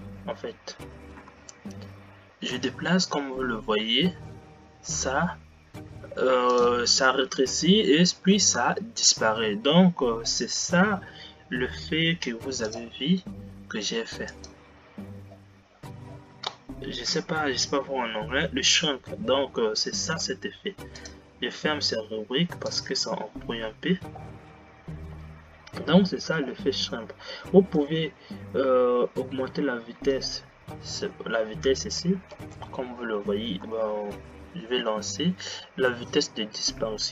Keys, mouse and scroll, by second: 11.5-12.3 scroll down 9, 12.9 click, 14.5 click, 15.5-16.4 scroll down 14, 21.2-25.9 drag, 26.2-31.0 drag, 31.1 click, 32.2 g.